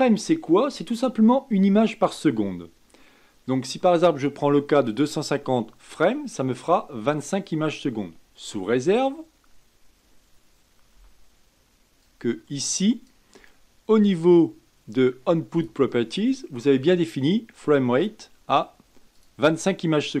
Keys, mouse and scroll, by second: 12.0-15.2 drag, 15.5 click, 17.9-20.2 drag.